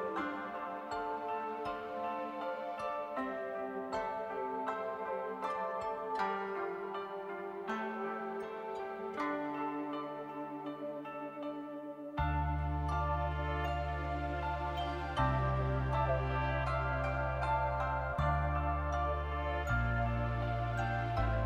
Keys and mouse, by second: 0.4 middle click, 0.9 middle click, 1.8 middle click, 2.0 middle click, 2.8 middle click, 5.2 shift+middle click, 5.6 click, 6.4 click, 6.8 shift+click, 7.4 click, 7.9 shift+click, 8.1 click, 8.5 shift+click, 8.9 middle click, 9.4 shift+middle click, 9.8 middle click, 10.5 middle click, 10.7 middle click, 13.0 click, 13.2 middle click, 13.5 shift+click, 13.7 middle click, 14.5 click, 14.7 middle click, 17.0 middle click, 18.2 click, 18.9 shift+click, 20.7 click, 21.0 shift+click.